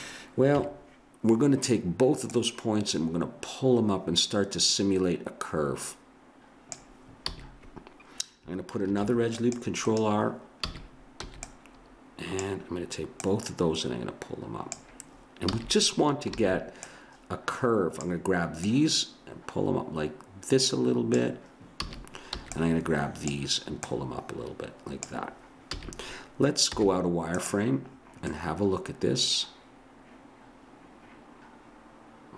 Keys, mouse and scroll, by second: 0.5 KP_3, 2.3 click, 7.3 a, 8.9 ctrl+r, 10.7 a, 11.3 b, 13.2-15.5 drag, 15.5 a, 16.4 b, 18.6 click, 21.8 a, 22.4 b, 23.9-25.2 drag, 25.7 a, 26.7 z, 28.5 middle click.